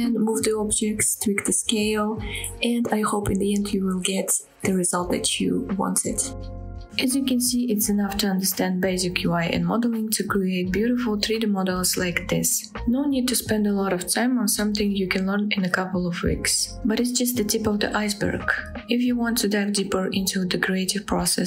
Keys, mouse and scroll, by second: 1.0-1.4 scroll down 1, 1.6-3.8 middle drag, 4.1-6.1 scroll up 2, 6.2 scroll down 1, 6.2-12.1 typing, 6.4 scroll down 2, 6.4 click, 6.6 shift+middle click, 6.7 click, 7.1 shift+click, 7.1 middle click, 7.2 scroll up 1, 7.7 shift+middle click, 7.7-8.1 scroll down 3, 7.8 click, 8.0 shift+click, 8.1 shift+middle click, 8.6 click, 8.6 middle click, 8.8 middle click, 9.2 click, 9.3 middle click, 9.7-10.1 scroll up 3, 9.8 shift+middle click, 10.2 click, 11.0 click, 11.1 shift+middle click, 11.2 click, 11.6 click, 11.7 middle click, 12.0 click, 12.8 shift+click, 13.1 click, 13.2 middle click, 13.3-14.6 typing, 13.8 click, 13.9 middle click, 14.0 shift+middle click, 14.1 scroll up 2, 14.2 shift+middle click, 15.0 click, 15.0 shift+middle click, 15.2 scroll down 1, 15.4 shift+click, 15.4 middle drag, 15.7 shift+d, 16.0 click, 16.1-16.7 right drag, 16.8-20.2 typing, 16.9 scroll up 2, 17.0 shift+middle click, 17.8 click, 18.5 click, 18.7 click, 18.9 shift+click, 19.0 click, 19.6 click, 19.7-20.0 middle drag, 19.8 scroll down 1, 20.0 click, 20.1 shift+click, 20.1 middle click, 21.0 shift+click, 21.0 shift+middle click, 21.1 scroll up 2.